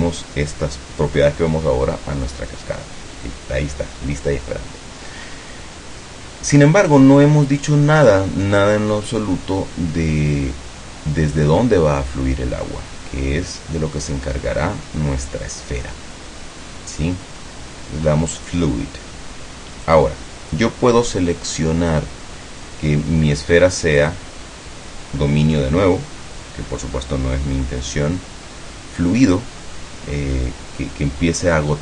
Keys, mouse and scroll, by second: 8.1 right click, 9.2 click, 18.5 click, 19.9 click, 24.1 click.